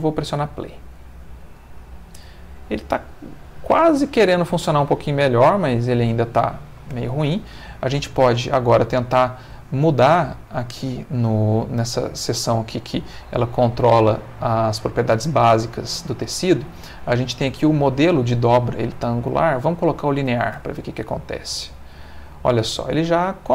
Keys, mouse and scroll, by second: 1.0 middle click, 2.6 middle click, 3.7-4.7 middle drag, 5.2 middle click, 6.5 middle click, 6.9 Escape, 8.2 click, 9.1 middle click, 12.7 click, 13.6 click, 16.0 middle click, 17.0 middle click, 18.9 click, 19.8 click, 20.5 space, 21.9 middle click, 23.3 middle click.